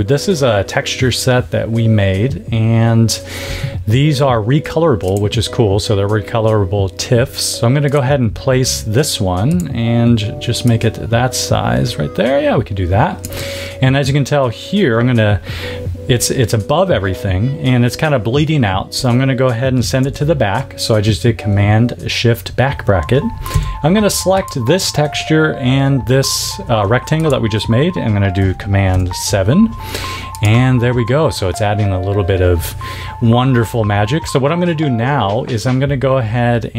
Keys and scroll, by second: 19.9 shift+super+[, 23.4 v, 28.8 super+7, 30.9 a.